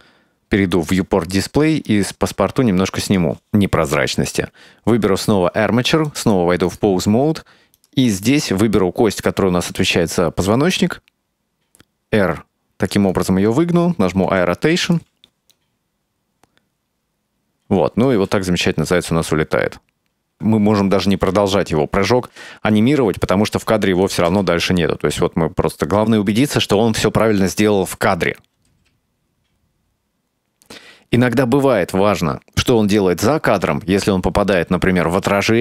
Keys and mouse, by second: 0.8 click, 2.0-3.3 drag, 4.3 right click, 6.2-6.8 drag, 7.8 right click, 10.5 r, 14.3 i, 15.6-18.1 drag, 18.2 space, 20.3 space, 21.6-22.2 middle drag, 24.1 click, 24.3 space, 26.4 space, 27.1 click, 28.8 space, 31.1 space.